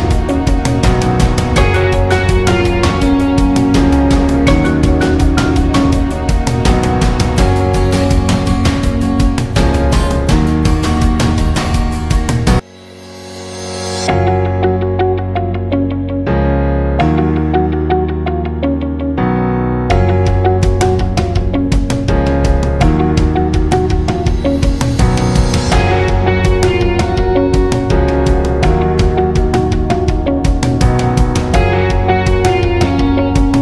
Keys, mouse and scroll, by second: 13.7 alt+scroll up 1, 14.0 space, 14.1 click, 14.5 space, 15.2 alt+scroll up 1, 15.6 space, 15.7 click, 16.4 alt+scroll down 1, 16.7 space, 16.8 click, 17.1 space, 18.3 alt+scroll down 1, 18.6 space, 18.8 click, 18.9 click, 19.2 space, 20.1 click, 21.2 right click, 22.4 click, 24.3 alt+scroll down 1, 24.6 space, 24.7 click, 25.2 alt+scroll up 1, 26.1 alt+scroll up 1, 26.3 space, 26.4-27.7 drag, 27.7 ctrl+v, 29.9 click.